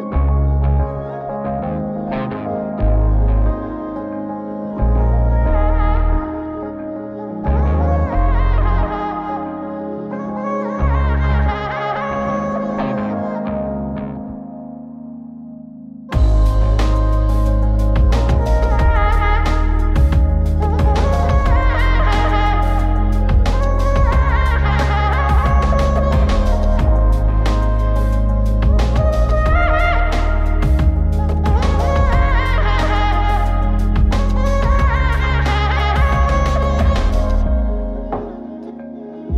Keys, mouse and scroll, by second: 0.2 middle click, 0.9-1.4 drag, 1.8-2.2 scroll up 2, 2.2 middle click, 2.7-3.5 scroll up 2, 3.5-5.2 drag, 6.4-6.8 ctrl+right drag, 7.4-8.4 drag, 9.5-10.6 drag, 11.4 ctrl+shift+click, 13.6-14.8 drag, 16.1-17.3 drag, 18.7-20.0 drag, 21.4 ctrl+shift+click, 23.7 middle click, 25.1-26.8 drag, 27.5 ctrl+shift+click, 29.5-30.2 drag, 31.2 ctrl+shift+click, 32.7 ctrl+shift+click, 33.4-33.7 scroll down 2, 33.7 middle click, 34.7 click, 35.1-36.0 drag, 36.5 ctrl+shift+click, 37.6 middle click, 38.4-39.3 drag.